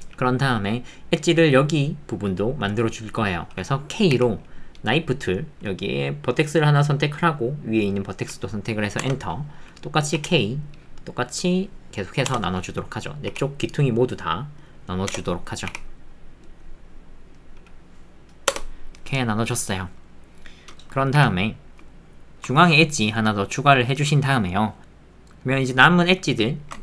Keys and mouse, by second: 22.3 ctrl+z, 22.3 ctrl+r, 22.5 ctrl+r, 24.8 ctrl+z.